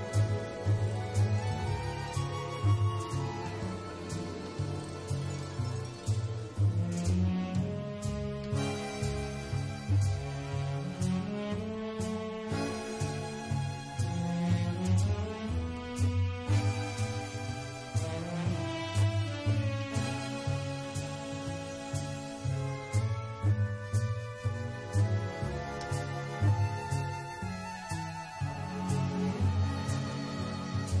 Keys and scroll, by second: 4.8 super+c, 8.8 super+f, 9.7 super+c, 11.2 super+f, 12.1 super+c, 13.2 super+f, 14.6 super+f, 15.7 super+z, 16.8 super+f, 21.2 super+c, 21.9 super+f.